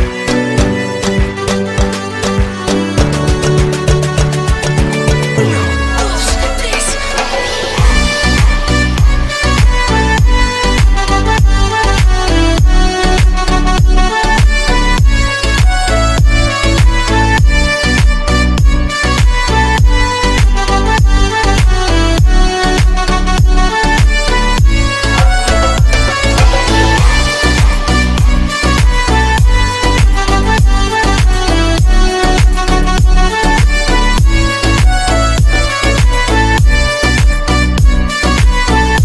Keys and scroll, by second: 13.4 Delete, 36.4 Delete.